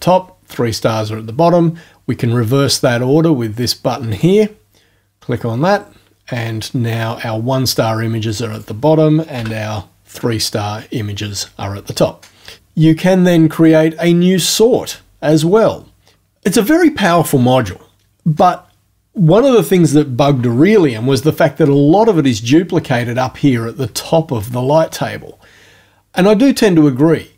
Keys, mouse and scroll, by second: 4.1 click, 8.5 click, 9.4 Home, 13.6 click.